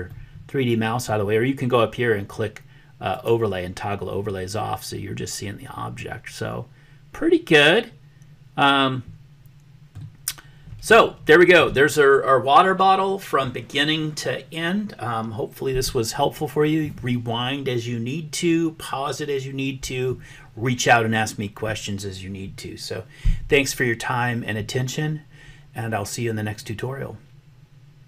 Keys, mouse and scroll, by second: 0.0-1.1 middle drag, 3.2 click, 6.0-10.0 middle drag, 11.0 shift+middle click.